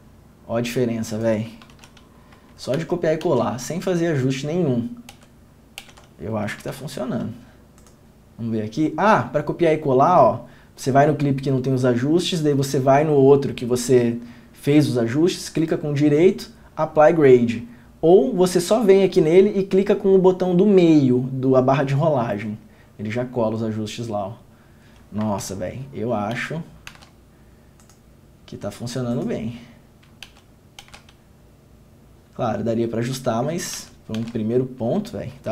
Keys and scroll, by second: 1.9 ctrl+f, 3.0 shift+d, 3.4 shift+d, 6.0 shift+d, 6.9 ctrl+f, 25.4 ctrl+f, 25.6 ctrl+f, 26.5 shift+d, 30.4 shift+d, 31.0 shift+d, 34.0 shift+d, 34.4 shift+d.